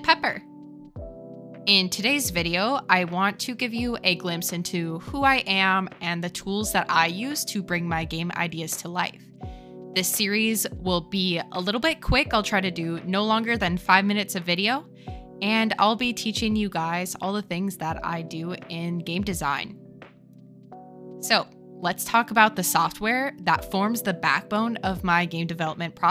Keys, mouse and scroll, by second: 3.7 click, 5.1-7.4 drag, 23.4-24.1 middle drag, 24.5 shift+click, 24.6 shift+middle click, 25.0-25.3 middle drag, 25.7 shift+middle click.